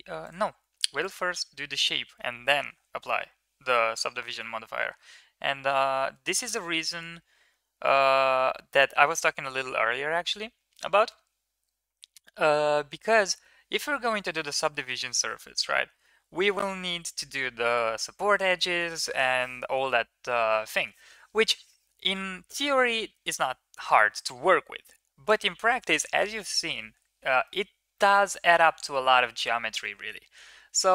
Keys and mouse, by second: 0.1 click, 27.2 middle drag, 29.9 KP_3, 30.4 KP_1.